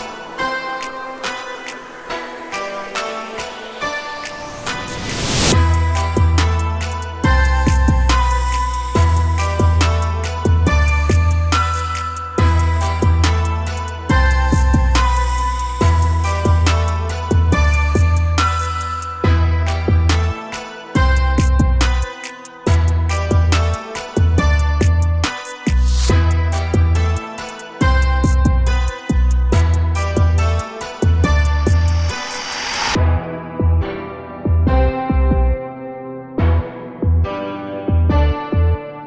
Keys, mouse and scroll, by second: 0.0-3.5 typing, 1.9 shift+middle click, 2.1 scroll up 3, 4.0-5.2 middle drag, 5.2-6.6 typing, 6.3 Tab, 6.4 scroll down 4, 6.7 middle drag, 7.0 scroll down 1, 7.2 shift+middle click, 7.5 scroll up 2, 7.6-7.9 middle drag, 7.9 click, 8.1 Tab, 8.8-10.6 typing, 12.6 a, 12.8 Tab, 13.0 a, 13.2 a, 13.7-14.2 middle drag, 14.2 scroll down 1, 14.4-15.0 middle drag, 15.0-15.4 scroll down 1, 15.4 shift+middle click, 15.8-16.7 scroll up 4, 16.7 click, 17.0 Tab, 19.2-21.5 drag, 21.5 a, 22.4 alt+s, 28.6 a, 28.9 Tab, 30.2-33.1 drag, 33.1 scroll down 1, 33.3 a, 33.5 a, 34.0-37.2 middle drag, 37.2-37.6 scroll up 2, 37.8-38.8 shift+middle drag, 38.8 scroll up 1.